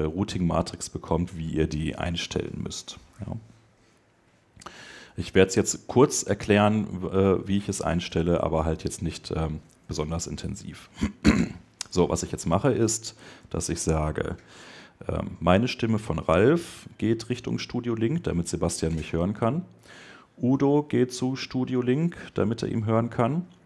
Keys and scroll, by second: 9.5 super+Tab.